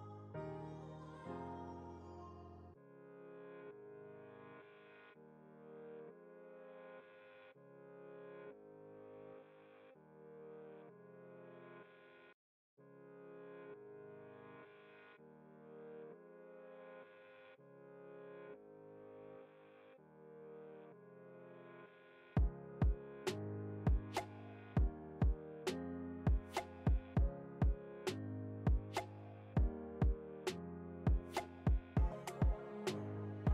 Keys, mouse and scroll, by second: 0.5-2.3 alt+drag, 2.3 ctrl+alt+z, 3.4-15.7 alt+drag, 15.7 alt+Return, 16.1 alt+click, 16.6 alt+scroll down 1, 17.9-18.4 alt+scroll up 1, 18.7 alt+scroll down 1, 18.9 ctrl+s, 20.7 ctrl+s, 21.1 shift+F12, 23.2-27.7 drag, 27.7 alt+scroll up 1, 29.2-30.7 alt+drag, 30.7-33.5 drag.